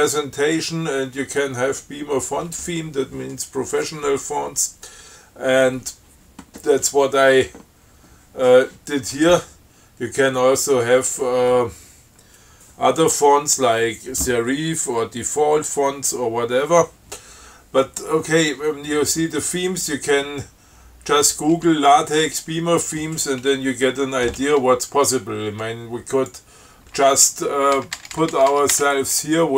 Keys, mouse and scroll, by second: 26.4 click, 28.0 BackSpace.